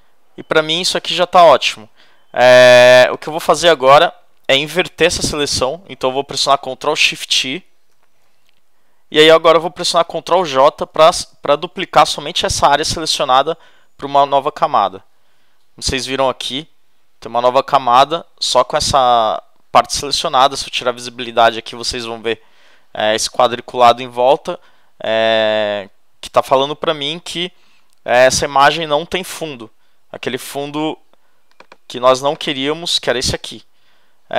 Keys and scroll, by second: 7.9 shift+super+i, 14.8 super+j.